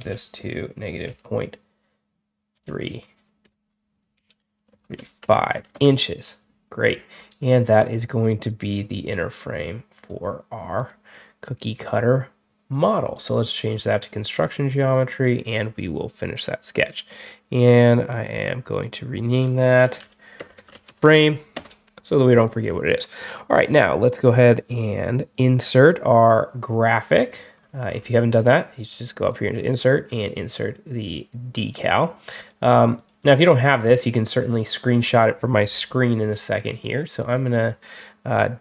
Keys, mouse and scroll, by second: 6.7 scroll up 2, 7.1 scroll down 2, 7.6 click, 8.3 shift+click, 9.8 shift+click, 10.6 shift+click, 13.0 click, 13.8 click, 14.8 click, 16.1 click, 16.7 right click, 18.6 click, 19.9-21.6 typing, 22.2 click, 23.8 click, 25.2 click, 26.7 click, 27.4 scroll up 2, 27.8 scroll down 2, 29.1 click, 31.6 click, 32.2 click, 32.8 click, 33.7 click, 36.6 click, 37.1 click, 37.2 click, 38.4 click.